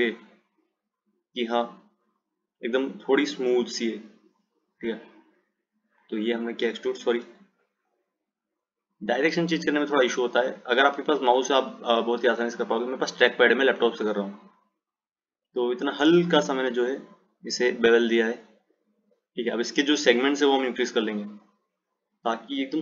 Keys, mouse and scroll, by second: 0.1 click, 2.2 click, 5.1 click, 7.6 ctrl+z, 9.2 click, 11.8 click, 20.8 click, 22.4-22.8 drag.